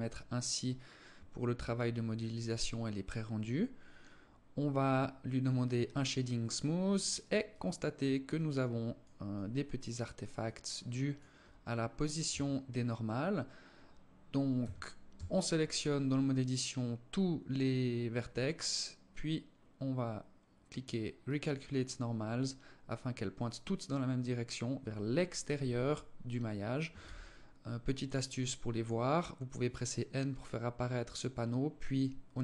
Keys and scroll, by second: 11.9 Tab, 14.1 a, 14.7 a, 26.5 n.